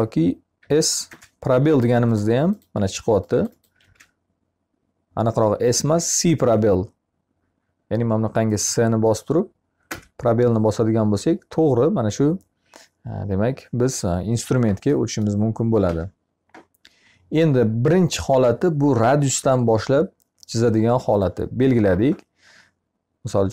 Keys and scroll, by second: 0.5 c, 2.8 Escape, 3.6 e, 6.2 c, 15.2 Escape.